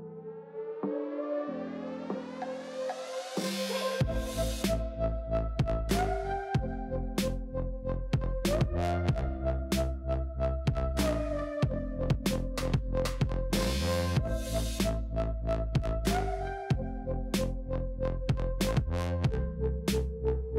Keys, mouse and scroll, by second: 4.2 Tab, 5.3 l, 5.8-6.3 middle drag, 6.3-7.9 scroll up 2, 8.1 click, 8.9 click, 12.0 l, 12.2 middle click, 12.9-14.4 scroll up 2, 13.1 middle click, 14.4 middle click, 14.7-16.0 scroll up 1, 16.0 alt+click, 16.6 ctrl+z, 17.4 alt+shift+click, 17.9 alt+shift+click, 18.2 alt+shift+click, 18.7 alt+shift+click, 19.2 ctrl+KP_Add, 19.9 middle click.